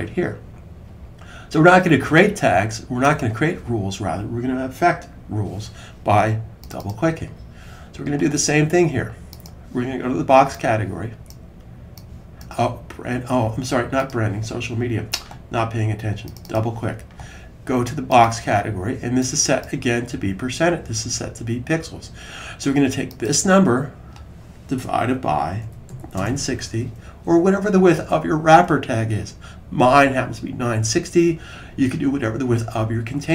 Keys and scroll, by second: 24.7-26.5 typing.